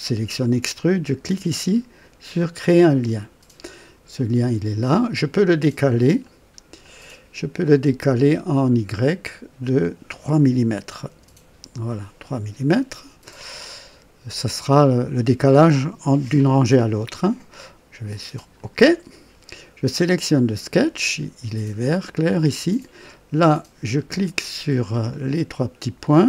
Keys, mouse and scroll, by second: 2.6 click, 4.1 click, 6.2 click, 6.8 click, 9.0 click, 11.1 KP_3, 18.5 click, 20.2 click, 24.2 click, 25.1 click.